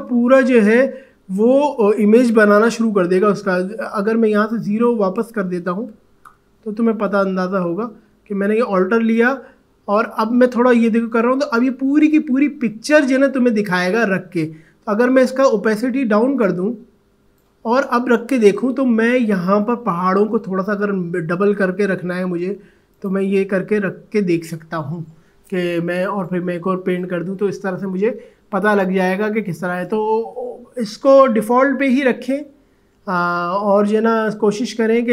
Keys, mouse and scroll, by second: 2.8-3.2 alt+scroll down 1, 4.4 click, 5.9 0, 6.2 Return, 9.2 alt+click, 16.4-20.0 drag, 22.9 click, 26.2-29.5 drag, 30.4 click, 30.8 ctrl+z, 33.3 ctrl+z.